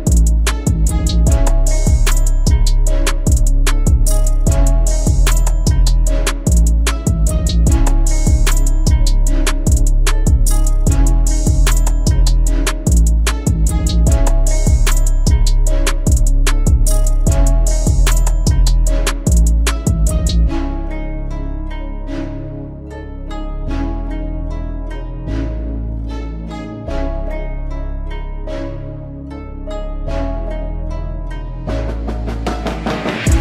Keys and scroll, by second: 1.2 Down, 2.3 Down, 2.8 Up.